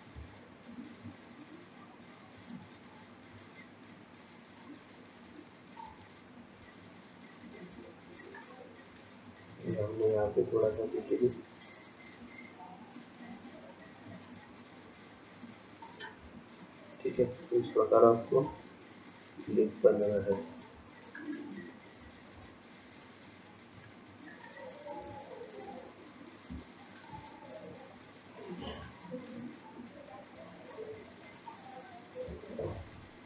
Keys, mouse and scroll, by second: 0.4 shift+click, 5.0 shift+click, 7.6 ctrl+click, 10.3-10.9 scroll down 4, 10.9-11.8 scroll up 2, 11.8 ctrl+click, 14.0 ctrl+click, 18.1 shift+click, 18.7-19.4 scroll down 4, 19.4-20.2 scroll up 6, 20.9 scroll up 2, 22.4 ctrl+click, 23.3 ctrl+click, 24.6 ctrl+click, 25.1-25.7 scroll down 5, 25.6-26.6 scroll up 2, 26.6 scroll up 1, 26.6 shift+middle click, 27.3-28.2 scroll up 1, 28.2-28.8 scroll up 1, 29.1 click, 32.5 shift+click.